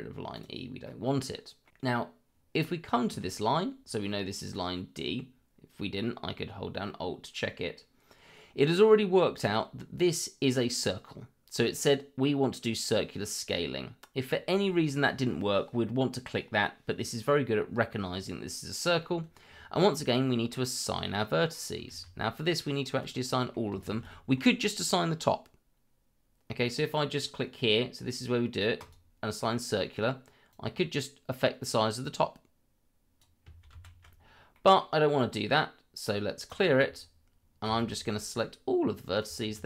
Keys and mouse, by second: 0.3 click, 0.8 middle click, 4.5 click, 19.0 middle click, 20.9-21.5 middle drag, 21.9 shift+z, 23.1-23.5 middle drag, 24.1 middle drag, 25.0-26.5 middle drag, 28.8 click, 29.4-29.8 middle drag, 30.5-33.2 drag, 33.7 ctrl+z, 34.5 middle click, 36.5 click, 37.7 shift+z, 38.4-39.2 drag.